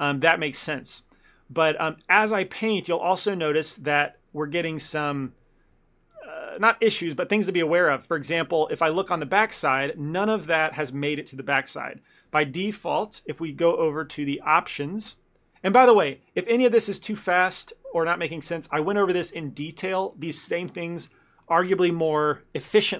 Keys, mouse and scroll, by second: 1.4 ctrl+middle click, 1.7 shift+middle click, 2.0 ctrl+middle click, 2.7 middle click, 3.1 shift+middle click, 3.9 click, 4.5 click, 4.8 click, 6.1 middle click, 7.1 middle click, 7.8 shift+middle click, 7.8 shift+middle click, 8.0 ctrl+middle click, 8.3 middle click, 9.1 middle click, 11.1 middle click, 11.5 middle click, 14.0 middle click.